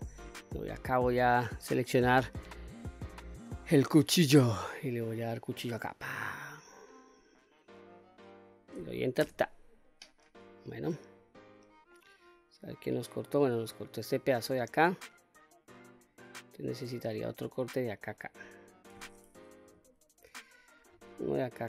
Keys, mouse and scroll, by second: 1.9 click, 5.1-9.4 drag, 11.1 click, 11.5-16.5 middle drag, 19.3 KP_3.